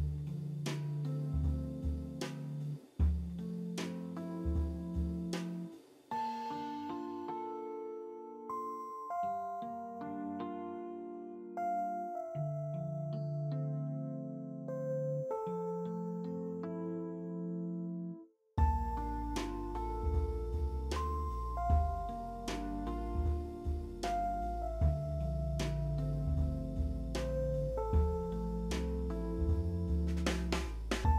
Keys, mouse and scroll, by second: 4.5 e, 7.2 w, 7.3 middle click, 10.5 middle click, 14.0 alt+click, 16.1 middle click, 24.3-24.8 scroll up 2, 24.8 scroll up 1, 25.1 alt+middle click, 30.2 double click, 30.6 double click, 31.0 double click.